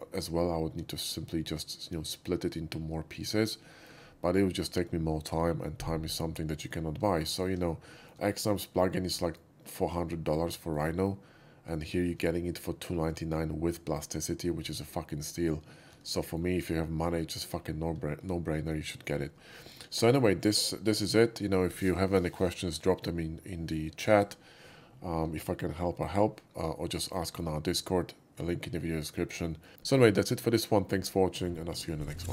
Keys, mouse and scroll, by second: 3.8 middle drag, 7.1 alt+middle click, 7.4 alt+middle click, 8.0 shift+middle click, 8.5 shift+middle click, 9.2 shift+middle click, 9.7-10.8 shift+middle drag, 16.3 alt+middle click, 18.7-19.2 alt+middle drag, 19.6 shift+middle click, 19.7 middle click, 20.0 middle drag, 25.4 alt+middle click, 26.0 alt+middle click, 27.3 shift+middle click, 27.5 scroll down 1, 27.8-29.2 shift+middle drag, 29.6 shift+middle click.